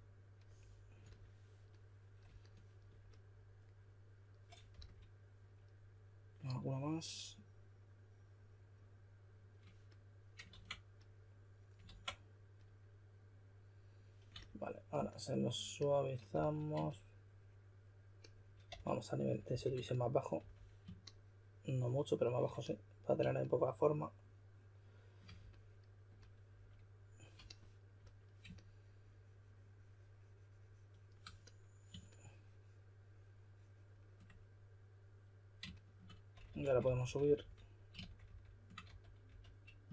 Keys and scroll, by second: 4.7 s, 10.5 super+z, 11.8 super+z, 16.3 s, 18.7-20.4 typing, 36.3-37.2 typing, 38.2-39.9 typing.